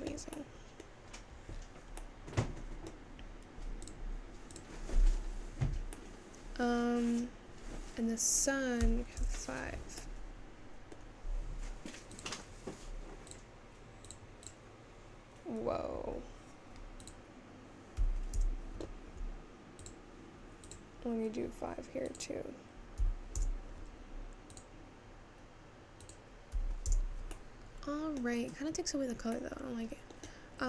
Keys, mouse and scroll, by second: 0.1 g, 4.1 middle click, 4.2-8.6 drag, 8.6-10.6 scroll down 2, 13.4-16.5 drag, 19.0-21.5 drag, 28.5 scroll up 1.